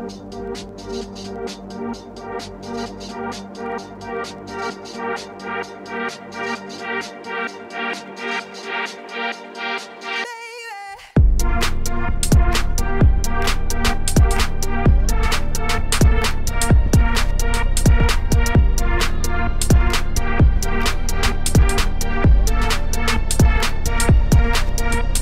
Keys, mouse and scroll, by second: 0.0-2.8 middle drag, 2.8 click, 3.4 scroll, 4.7 click, 6.9 middle click, 7.3 scroll down 3, 7.6 middle click, 8.4 click, 9.2-13.4 drag, 14.3 click, 15.5 click, 17.0 middle click, 17.6 click, 20.9-24.2 drag, 24.2 middle click, 24.7 scroll, 25.0 shift+middle click.